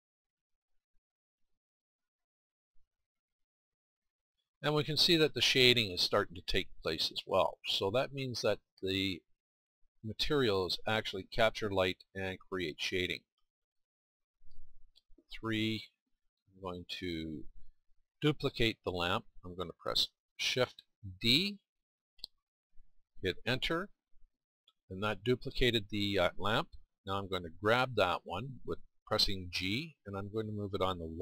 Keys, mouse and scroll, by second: 3.7-5.0 middle drag, 8.0-12.2 middle drag, 15.3 middle click.